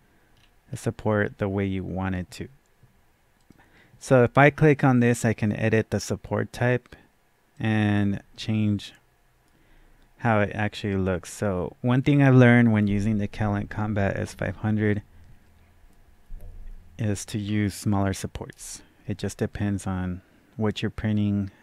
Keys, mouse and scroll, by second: 0.3-0.7 scroll down 1, 1.2-3.0 scroll down 1, 3.4 click, 7.5 click, 7.5-7.8 scroll down 1.